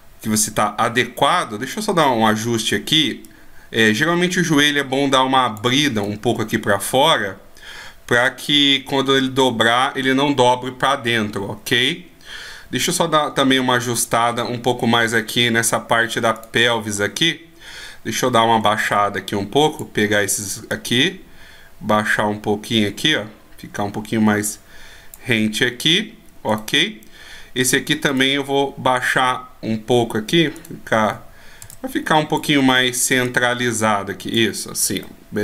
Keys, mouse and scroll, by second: 1.2 Tab, 1.7 right click, 3.2 click, 6.0-6.4 scroll up 2, 8.2 click, 14.3 a, 16.4 right click, 16.9 a, 18.8 b, 20.7 click, 26.5 right click, 31.0 a, 31.6 b, 33.2 click, 35.0 middle click.